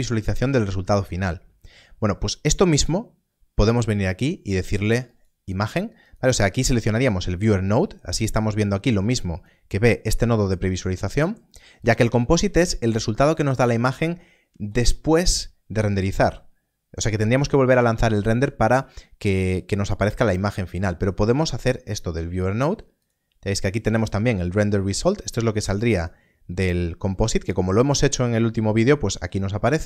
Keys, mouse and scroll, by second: 5.0 click, 9.7-10.2 scroll up 1, 10.2 middle click, 10.9-11.7 scroll up 1, 11.7 click, 21.3 click, 25.9 click.